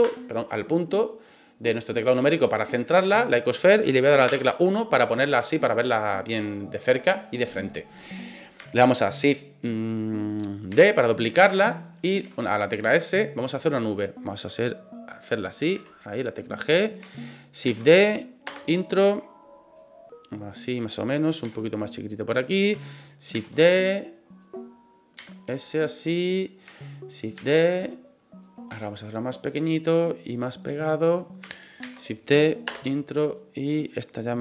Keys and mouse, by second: 0.0 KP_Decimal, 2.2-3.8 middle drag, 4.2 KP_1, 10.7 shift+d, 11.8 click, 12.2 s, 13.8 click, 15.7 g, 16.4 middle click, 17.6 shift+d, 18.4 Return, 19.8-20.8 drag, 21.4 s, 22.4 click, 23.3 shift+d, 24.4 click, 25.1 s, 26.2 click, 27.3 shift+d, 28.4 click, 28.7 s, 29.6 click, 30.8 click, 31.8 shift+d, 32.7 Return, 33.4 click.